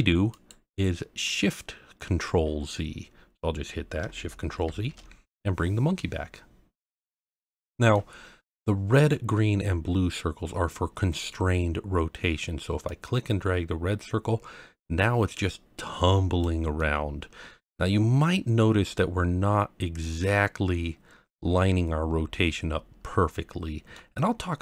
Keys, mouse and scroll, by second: 0.3-3.0 drag, 4.6 ctrl+shift+z, 7.4-7.9 middle drag, 8.3-9.3 scroll up 1, 12.8 click, 16.8-18.9 middle drag, 20.2-23.9 middle drag.